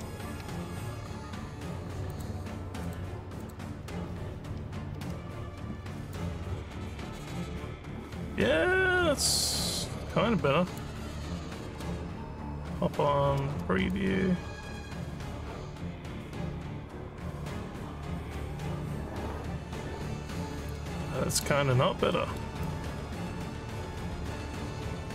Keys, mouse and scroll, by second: 2.1 click, 2.8 click, 3.4 click, 6.1-10.7 alt+drag, 11.4 z, 13.9-21.3 alt+drag, 21.7 scroll up 2, 22.2 alt+middle click, 22.7-25.1 alt+drag.